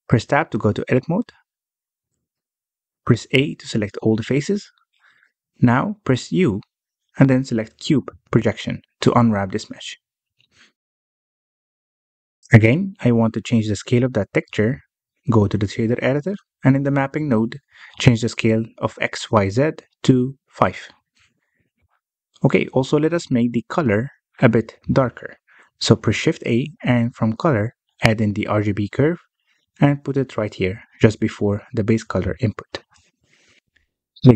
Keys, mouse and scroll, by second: 1.0 Tab, 2.1-3.7 scroll down 1, 3.7 a, 5.2-6.9 scroll down 1, 6.9 u, 10.7 a, 15.1 scroll down 1, 15.2 middle click, 15.9-16.8 scroll up 16, 17.1 middle click, 17.4-18.0 scroll up 2, 18.0-22.1 drag, 22.4 Tab, 23.8 alt+a, 24.5 click, 25.9-26.6 scroll down 13, 26.6-27.9 middle drag, 27.9 shift+a, 32.6-33.1 scroll up 3, 33.1 middle click, 33.6 scroll up 2.